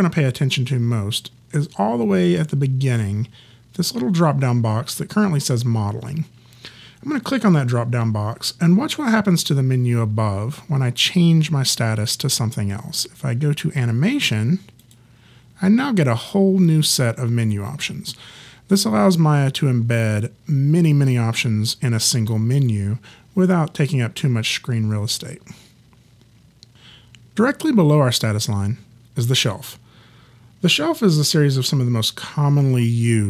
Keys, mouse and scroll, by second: 7.3 click, 14.8 click.